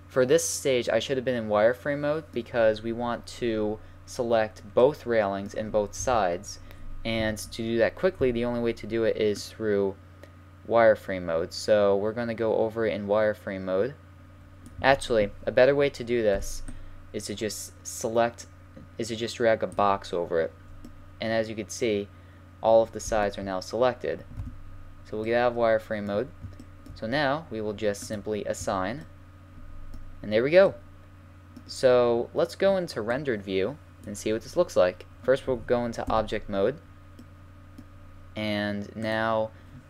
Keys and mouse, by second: 6.0 KP_1, 7.2 z, 8.2 c, 16.3 b, 20.9-24.4 middle drag, 24.4 z, 28.1 middle click, 28.2 click, 28.5 click, 28.6 a, 29.0 middle click, 33.1-34.9 drag, 36.1 Tab, 36.8-38.4 drag, 39.0-39.8 drag.